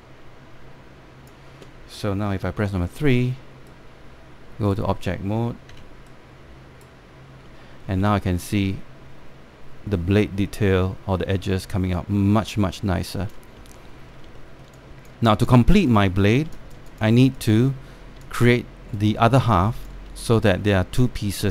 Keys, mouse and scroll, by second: 3.5 3, 4.3-6.4 right drag, 6.4 q, 6.4 q, 6.8-8.7 right drag, 8.7-14.0 alt+drag, 14.5 alt+middle click, 15.0 alt+middle click, 15.6 alt+click, 15.9 scroll down 1, 16.2 alt+click, 16.4 click, 17.1 scroll down 1, 17.2 alt+click, 18.2 alt+click, 18.7 scroll up 1, 18.8 alt+click, 20.7 scroll up 1, 20.8 alt+click.